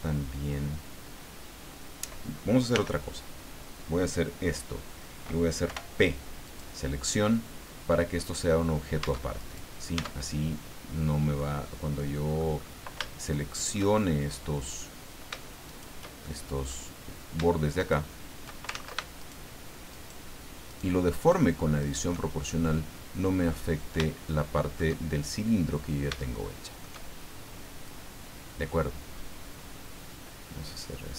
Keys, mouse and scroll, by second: 2.7 l, 5.6 p, 6.5 click, 9.0 Tab, 9.4 right click, 9.9 Tab, 10.7 middle click, 12.0 middle click, 12.5 scroll up 2, 13.3 shift+middle click, 14.3-14.6 scroll down 2, 14.9 scroll up 2, 15.7 shift+right click, 16.2 shift+middle click, 16.9 scroll up 2, 17.8 shift+right click, 18.7 ctrl+shift+z, 19.2 ctrl+shift+right click, 19.9 shift+right click, 20.7 shift+right click, 21.2 shift+right click, 21.8 shift+right click, 22.3-22.6 shift+scroll down 2, 22.6-23.7 middle drag, 24.2 shift+middle click, 26.2 shift+middle click, 27.8 click, 28.5-29.2 scroll down 2, 29.5 scroll down 1, 31.0 scroll up 1.